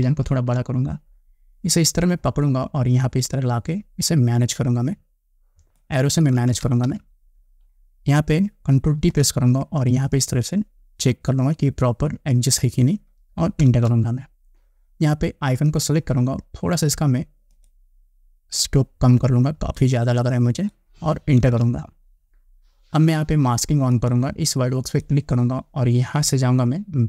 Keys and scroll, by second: 0.3 ctrl+=, 6.6 Left, 9.2 ctrl+t, 13.9 Return, 21.6 Return.